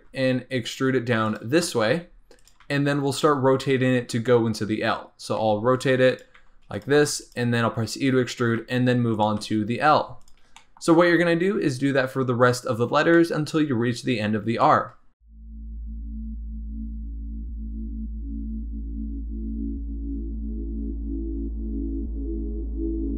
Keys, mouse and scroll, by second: 1.8 g, 2.6 r, 3.5 scroll down 2, 5.4-9.3 typing, 10.5 shift+middle click, 11.1-11.5 scroll down 4, 13.1-14.1 shift+middle drag, 14.1-14.6 scroll up 2, 14.6 shift+middle click, 15.0 scroll up 2, 15.1 shift+middle click, 15.2 scroll down 2, 15.5-23.1 typing, 17.1 shift+middle click, 18.6 scroll up 2, 18.9 click, 19.9 click, 22.0 shift+middle click, 22.6 shift+middle click, 22.7 scroll down 3, 22.9 scroll up 3.